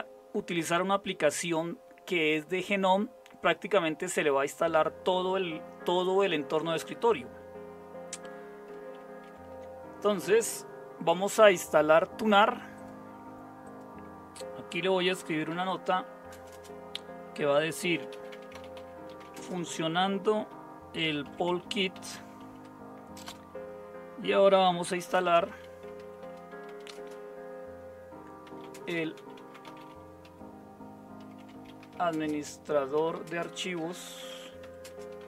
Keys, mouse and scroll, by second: 9.2 super+0, 15.5-16.5 typing, 17.6-19.7 typing, 20.9-23.2 typing, 24.8-35.2 typing.